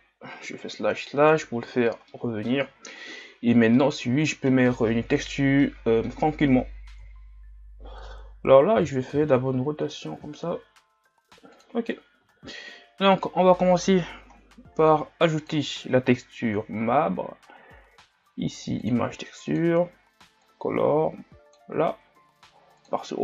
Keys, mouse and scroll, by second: 0.6 KP_Divide, 1.0 KP_Divide, 2.1-7.0 middle drag, 7.0 KP_1, 8.8 r, 12.2 Tab, 13.2-23.2 drag.